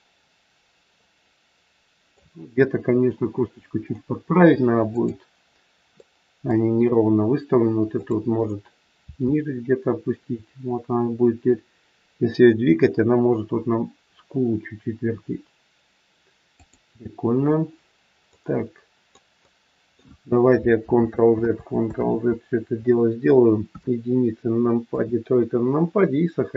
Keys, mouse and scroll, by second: 4.8 click, 5.9 middle click, 7.9 click, 9.0 r, 18.2 scroll up 1, 18.3 middle click, 19.4 middle click, 20.8 ctrl+z, 21.4 ctrl+z, 22.0 ctrl+z, 23.6 KP_1, 24.3 scroll down 3, 24.8 KP_3, 25.3-25.6 scroll down 2.